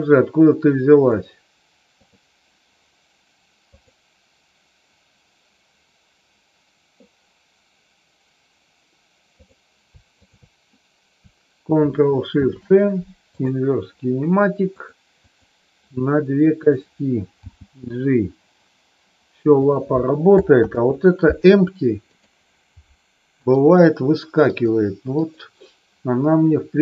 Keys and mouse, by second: 1.0 click, 3.7 click, 10.1 shift+click, 14.7 click, 16.6 click, 17.4 g, 19.5 click, 20.6 ctrl+z, 22.0 click, 23.4 click.